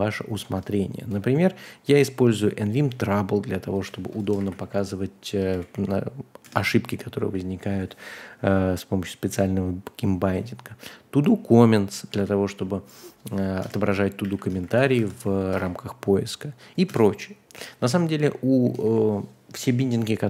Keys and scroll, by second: 3.8 a, 4.2 Return, 4.4 super+v, 4.7 Escape, 5.2-6.2 typing, 6.4 Return, 12.1 super+c, 13.6 Return, 14.2 a, 14.5 Return, 14.7 super+v, 14.9 Escape, 15.5 space, 15.5 w, 16.8 Return, 17.9-19.3 typing.